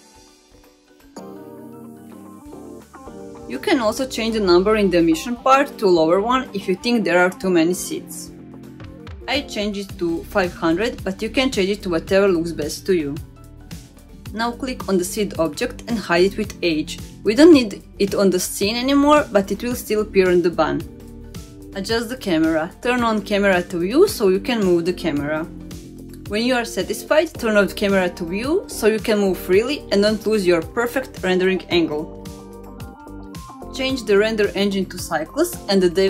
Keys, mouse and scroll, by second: 0.1-0.9 scroll up 2, 0.9-3.0 drag, 4.4-5.0 scroll down 2, 5.0 click, 5.6-8.3 middle drag, 9.4-11.1 drag, 10.7 0, 12.5-13.9 middle drag, 13.9-14.7 scroll down 1, 14.8 click, 16.4 h, 17.3-19.6 middle drag, 21.5 click, 23.8 n, 24.8 click, 25.5 click, 25.9 scroll up 1, 26.1-26.5 middle drag, 26.9 scroll up 1, 27.2-27.5 shift+middle drag, 27.7 scroll up 1, 27.8-31.3 middle drag, 31.6 shift+middle drag, 31.9 middle click, 33.5 click, 34.0 click, 34.3-34.6 middle drag, 35.6 click.